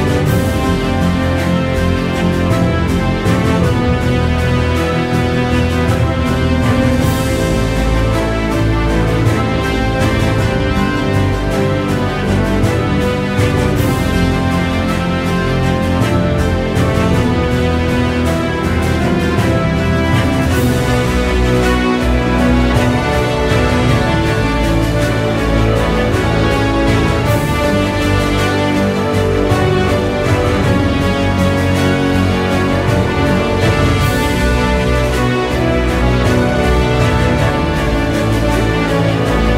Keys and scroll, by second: 19.7 ].